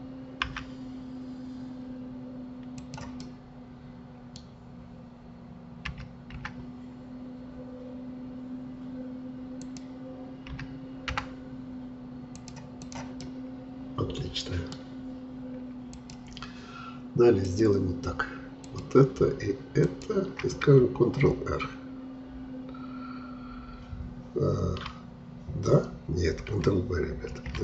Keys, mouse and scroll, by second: 0.5 e, 3.2-5.9 middle drag, 5.9 s, 10.6 s, 12.8 click, 13.2-16.0 middle drag, 16.0-22.8 drag, 27.4 ctrl+b.